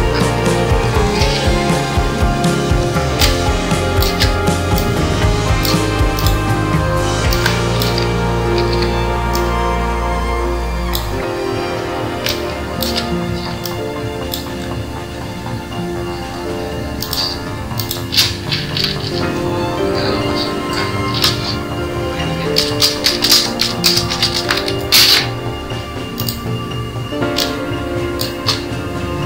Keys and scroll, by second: 0.6 ctrl+g, 8.2 ctrl+g.